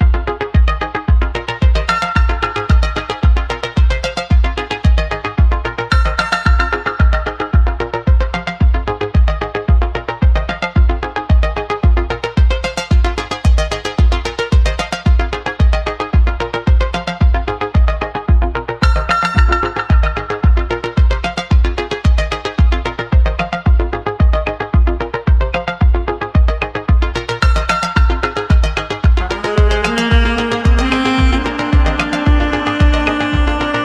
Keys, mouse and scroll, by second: 4.7-7.2 middle drag, 8.2-9.4 scroll down 2, 9.4 Tab, 10.4 Tab, 11.6 ctrl+z, 19.0-19.4 scroll down 1, 19.4-19.9 scroll up 1, 19.9-21.8 scroll down 1.